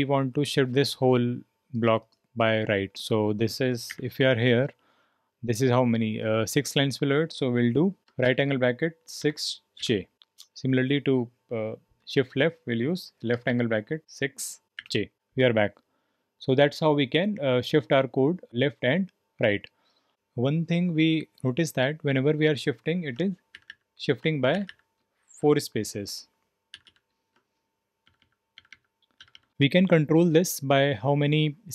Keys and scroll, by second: 0.0-31.7 typing.